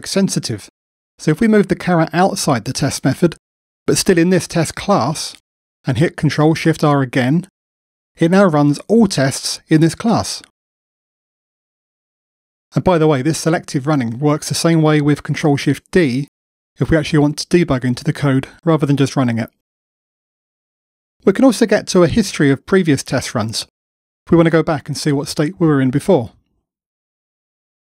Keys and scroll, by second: 7.4 ctrl+shift+r.